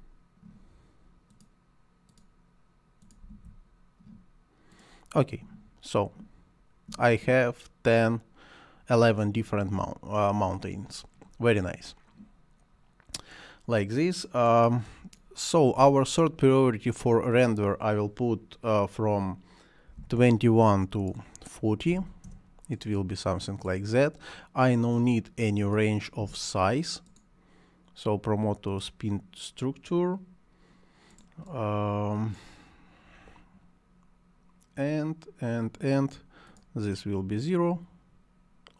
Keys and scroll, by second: 0.0-0.3 typing, 3.0-3.8 typing, 19.9 2, 21.7-22.5 typing, 26.2 Delete.